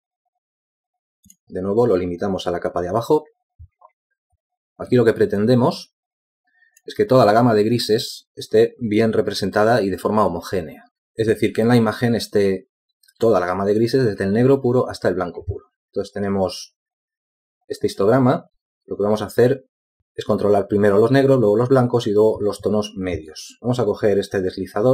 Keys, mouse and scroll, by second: 6.5 z.